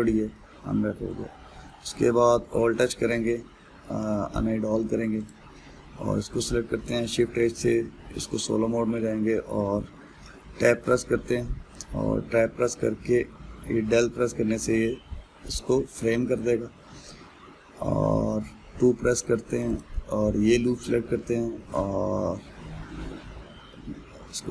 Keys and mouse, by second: 0.3-1.4 middle drag, 1.4 Tab, 3.0 alt+h, 3.7-5.9 middle drag, 5.9 click, 6.3-7.6 middle drag, 7.6 shift+h, 8.3-11.0 middle drag, 11.0 Tab, 11.5-13.9 middle drag, 13.9 KP_Decimal, 15.0-18.0 middle drag, 20.4 alt+click, 20.8-23.9 middle drag.